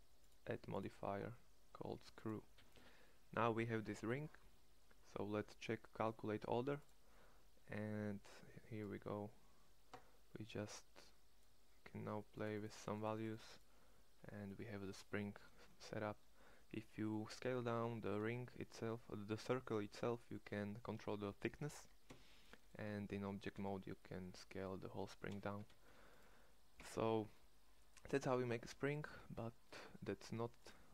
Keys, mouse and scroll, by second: 18.0 s, 22.8 Tab, 23.6 s, 25.7 x, 26.7 1.